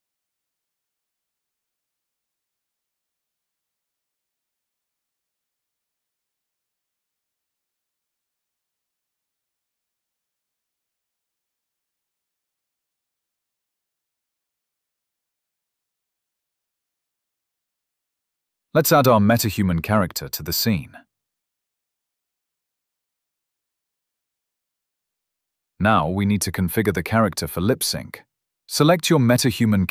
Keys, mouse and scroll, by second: 2.5 click, 8.1 click, 11.3 click, 19.1 click, 21.1-23.1 typing, 21.2 click, 21.3 right click, 21.6 click, 22.3 right click, 23.6 click, 24.9 right click, 25.4 click, 25.5 s, 25.7 click.